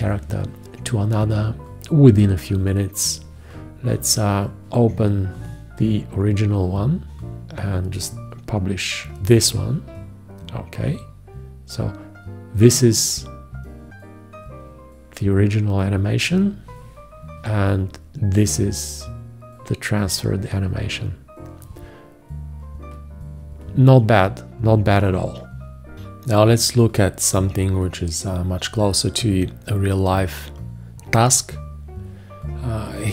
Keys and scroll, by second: 9.2 ctrl+Return, 17.3 ctrl+Return.